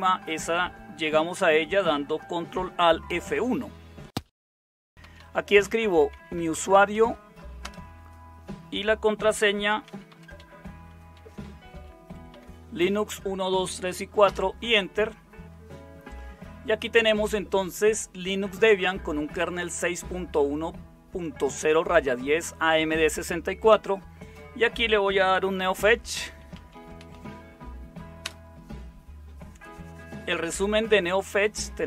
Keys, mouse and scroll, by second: 4.9-7.4 typing, 7.6 Return, 9.1-12.8 typing, 14.2 typing, 25.1-28.2 typing.